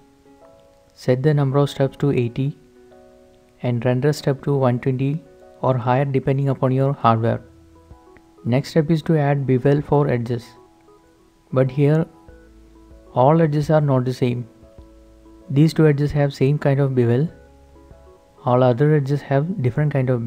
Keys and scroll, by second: 0.9-1.7 typing, 2.0 Return, 4.6-5.3 typing, 6.1 Return, 11.4 shift+7, 12.9 h.